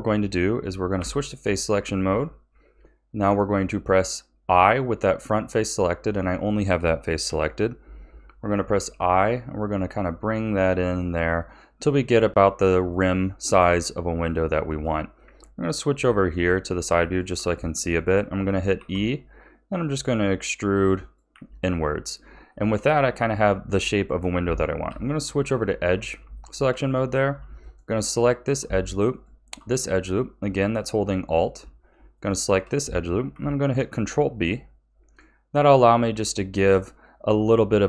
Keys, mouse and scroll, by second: 1.0 3, 1.4 click, 5.6-7.2 middle drag, 7.2 KP_1, 8.7 i, 14.4-16.6 shift+middle drag, 16.6-17.0 scroll down 2, 17.0-18.7 shift+middle drag, 18.7 e, 21.3 a, 22.5-24.8 shift+middle drag, 24.8 2, 25.5-26.3 scroll up 5, 26.3-27.6 shift+middle drag, 27.6 alt+shift+click, 29.1 alt+shift+click, 29.9-30.7 scroll down 2, 30.7-32.1 middle drag, 32.1 alt+shift+click, 33.6 ctrl+b.